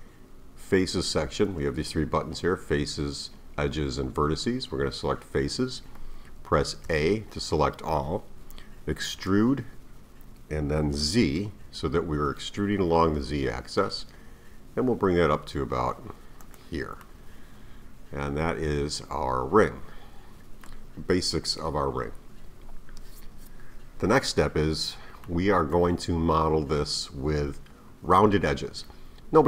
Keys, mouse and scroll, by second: 6.9 a, 9.1 e, 17.0-20.0 middle drag, 25.2-28.3 middle drag.